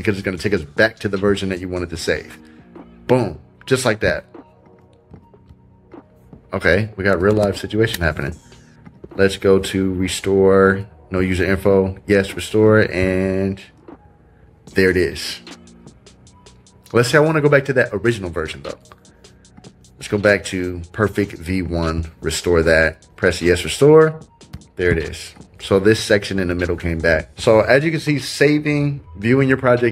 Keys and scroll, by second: 7.3 super+z.